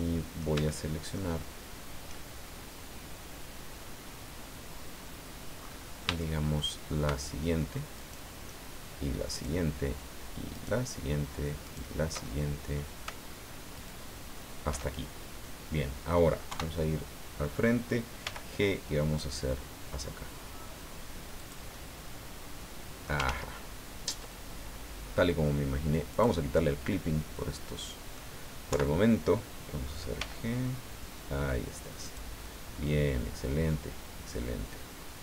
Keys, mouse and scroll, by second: 0.7 shift+click, 5.6-5.9 scroll up 2, 6.2 shift+middle click, 7.9 alt+shift+right click, 9.3 alt+shift+right click, 10.5 alt+shift+right click, 11.6 alt+shift+right click, 12.2 alt+shift+middle click, 13.7 alt+shift+right click, 15.0 alt+shift+scroll down 3, 15.3 click, 16.5 KP_1, 18.2 g, 21.4 click, 21.7-23.2 middle drag, 23.2 ctrl+z, 26.1 click, 27.4 middle click, 28.7 KP_1, 30.1 g, 32.0 click, 32.3-35.2 middle drag.